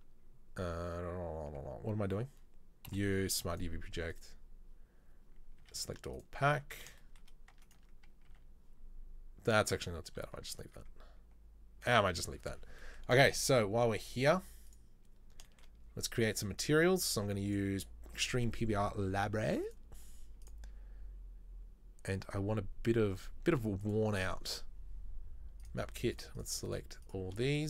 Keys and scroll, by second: 14.9 Tab.